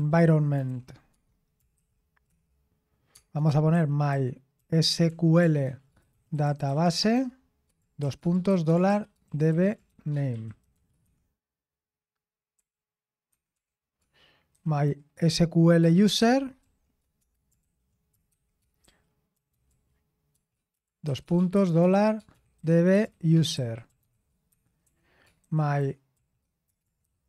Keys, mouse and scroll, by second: 0.0-2.2 typing, 3.7-11.0 typing, 12.3-14.5 typing, 15.6-26.2 typing, 27.0 Escape.